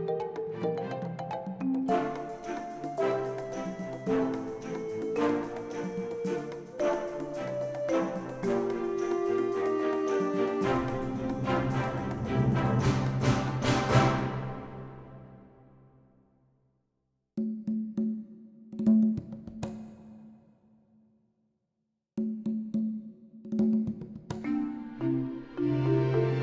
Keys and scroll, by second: 2.9 ctrl+r, 4.1 ctrl+r, 4.9 ctrl+r, 5.7 2, 8.0 ctrl+b, 10.2 alt+s, 17.6 ctrl+r, 18.6 ctrl+r, 20.4 ctrl+b, 22.3 alt+s, 24.2 Tab, 25.0 alt+a.